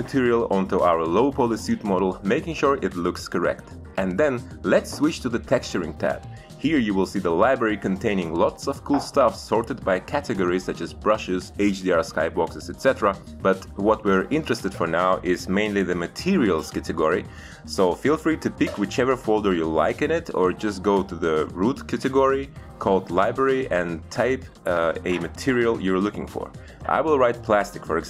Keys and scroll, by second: 22.8 l, 23.8 Return.